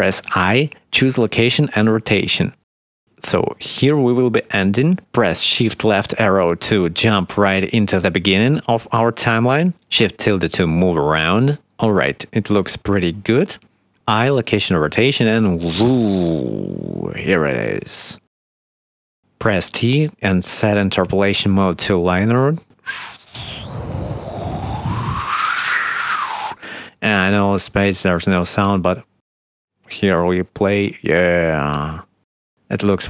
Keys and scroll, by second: 0.8 i, 3.2 shift+Right, 4.4 i, 6.5 shift+Left, 7.5 shift+`, 7.8 shift+d, 8.9 shift+w, 9.6 shift+d, 10.2 shift+q, 10.9 shift+d, 12.1 shift+q, 13.7 i, 20.1 t, 28.5 space.